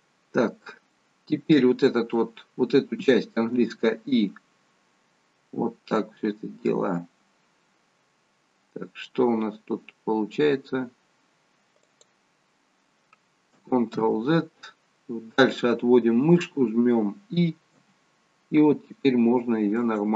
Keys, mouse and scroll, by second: 0.9 middle click, 3.7 i, 14.0 ctrl+z, 17.7 i.